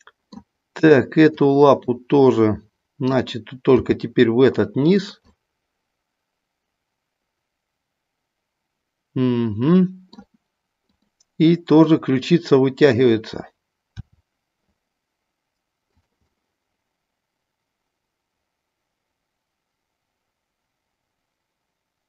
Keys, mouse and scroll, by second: 1.2 click, 1.7-3.1 middle drag, 3.7 g, 5.3-10.2 middle drag, 10.7 click, 11.8 middle click, 13.8 r, 16.4-22.0 middle drag.